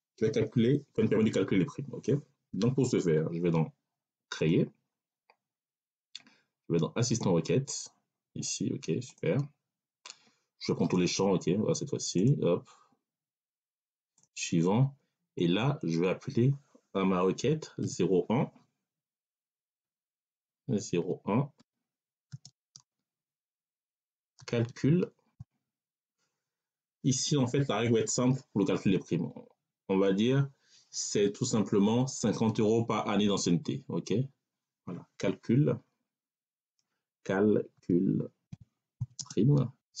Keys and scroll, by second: 17.7 0, 19.1 BackSpace, 20.2 0, 20.9 1, 22.2 space, 22.4 6, 24.2 c, 24.6 a, 25.2 l, 37.6-40.0 typing.